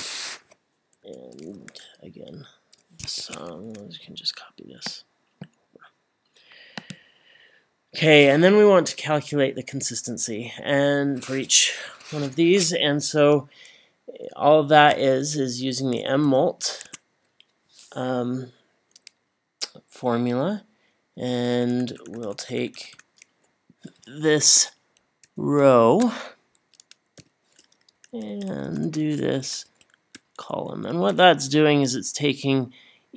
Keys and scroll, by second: 1.0 =, 3.2 Escape, 3.7 Left, 14.9 =, 16.0 m, 16.3 m, 16.9 Tab, 21.2 Left, 21.4 Left, 21.5 Left, 21.7 Left, 21.9 Left, 22.1 Left, 22.2 Left, 22.4 Left, 22.6 Left, 22.7 Left, 22.9 Left, 25.2 shift+Right, 27.9 Right, 28.5 Left, 28.7 Left, 28.8 Left, 29.0 Left, 29.4 Left.